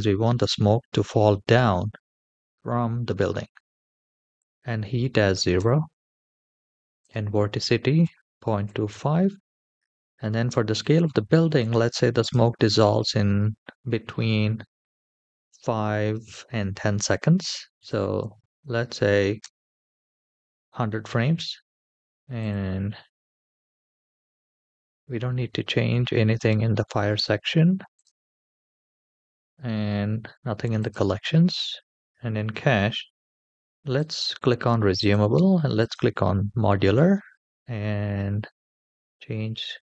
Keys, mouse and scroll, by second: 0.8 middle click, 1.7 shift+middle click, 2.3 middle click, 4.1-5.9 drag, 6.8-9.2 drag, 9.9-12.0 scroll down 2, 12.0-19.7 drag, 18.1 KP_0, 22.2 click, 27.8 click, 30.7 click, 34.1 click, 34.7-36.1 drag, 36.9-37.4 scroll down 2, 38.7-40.0 drag.